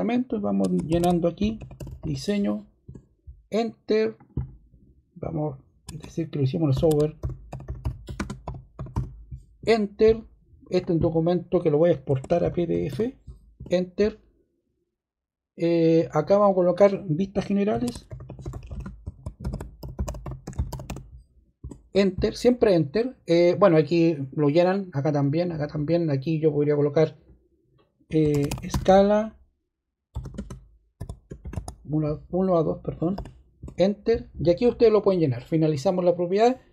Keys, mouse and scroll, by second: 0.8-2.4 typing, 2.8 Return, 6.4-9.3 typing, 9.5 Return, 10.7 click, 10.9 click, 12.1-13.3 typing, 13.5 Return, 16.2 click, 17.4-21.4 typing, 21.5 Return, 28.0-33.0 typing, 33.5 Return.